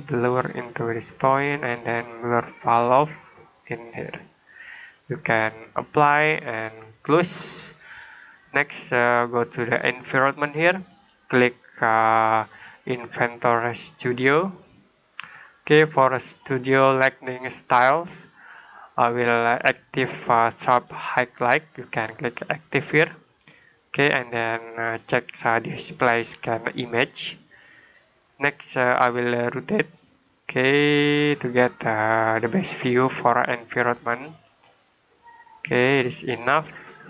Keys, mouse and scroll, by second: 9.9 click, 13.7 click, 17.4 click, 20.7 right click, 22.6 click, 27.0 click, 30.5 click.